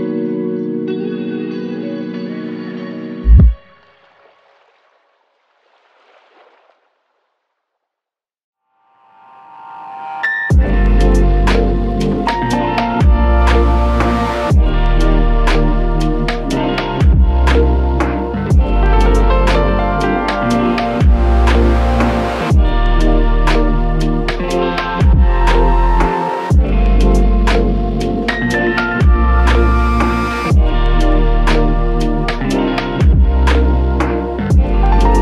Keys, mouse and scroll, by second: 6.2 ctrl+z, 9.3 ctrl+click, 10.9 alt+click, 25.2 typing, 25.6 Return, 33.4 typing, 33.9 Return.